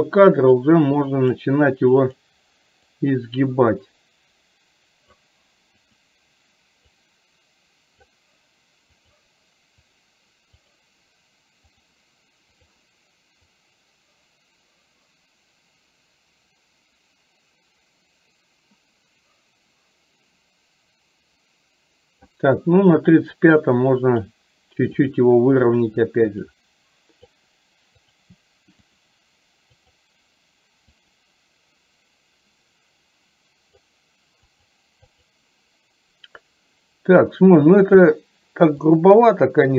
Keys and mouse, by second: 0.8 click, 3.1-5.3 drag, 7.0 click, 9.0 click, 13.6-22.4 drag, 23.5 click, 26.6 click, 29.9 click, 31.2-33.8 drag, 34.7 click, 35.2 click, 37.9 click, 39.3 click.